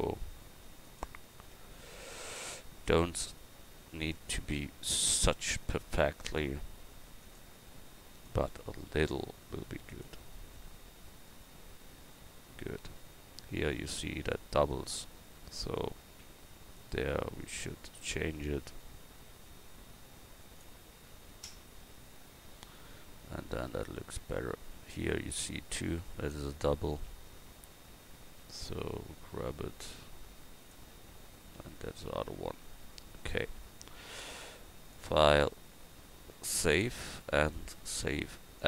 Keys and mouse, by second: 2.5 g, 10.3 Tab, 15.6 right click, 16.2 Tab, 18.8 g, 21.8 Tab, 26.0 Tab, 26.5 Tab, 27.0 Tab, 29.2 g, 31.0 Tab, 32.1 a.